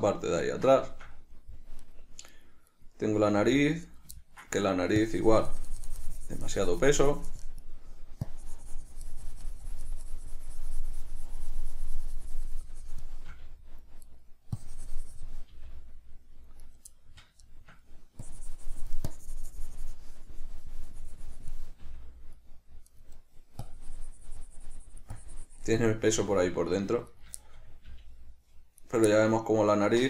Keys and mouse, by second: 0.1-2.1 middle drag, 2.1 right click, 2.6 right click, 2.9 right click, 3.6 g, 4.2 right click, 4.4 ctrl+middle click, 5.3-14.4 drag, 14.4 right click, 14.8-17.0 drag, 15.8 g, 17.0 right click, 17.2-18.5 middle drag, 18.5-23.2 drag, 22.1 g, 23.2 right click, 23.9-27.4 drag, 26.4 g, 27.4 right click, 27.7-29.2 shift+middle drag, 28.2 g, 29.2 right click, 29.4-30.0 shift+middle drag.